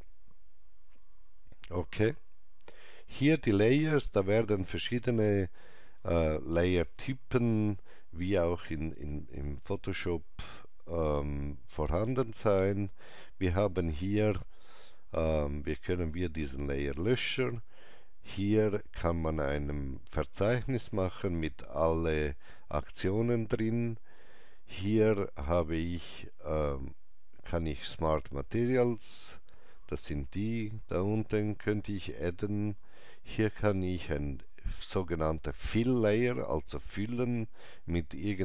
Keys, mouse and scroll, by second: 17.0 click, 31.0 click.